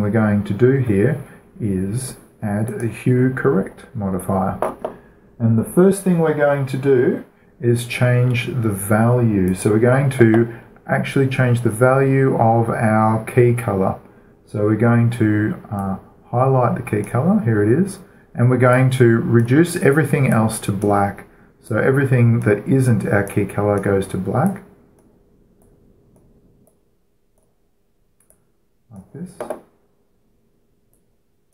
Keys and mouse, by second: 3.1-4.9 drag, 4.9-9.9 middle drag, 9.9-11.7 drag, 16.2-31.2 drag, 31.3-31.5 drag.